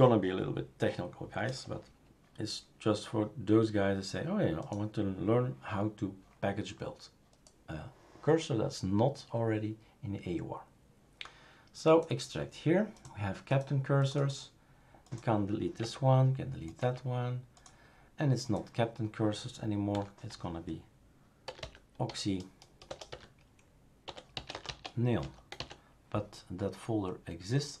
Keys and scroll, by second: 15.8 Delete, 16.8 Delete, 19.9 F2, 21.2-26.1 typing.